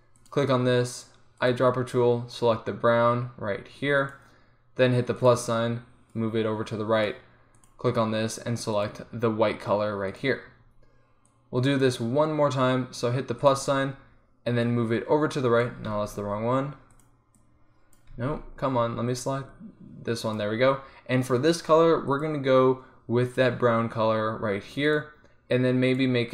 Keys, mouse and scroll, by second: 5.3-10.5 drag, 11.4-13.2 drag, 13.2 middle click, 13.5-16.6 drag, 16.6 ctrl+z, 18.8 ctrl+z, 22.2-23.9 drag, 23.9-26.0 middle drag, 26.0-26.3 drag.